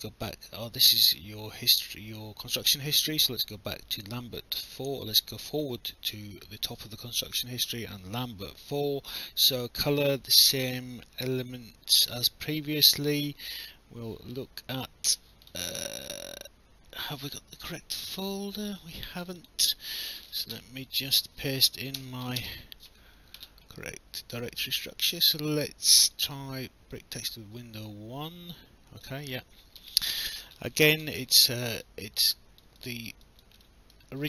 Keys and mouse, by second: 9.5 click, 11.9 click, 13.5 click, 19.4 click, 20.2 ctrl+c, 21.2 click, 22.0 BackSpace, 22.2 ctrl+v, 22.4 Return, 22.4 KP_Enter, 26.1 click, 29.0 click, 31.8 alt+click, 33.6 alt+middle click.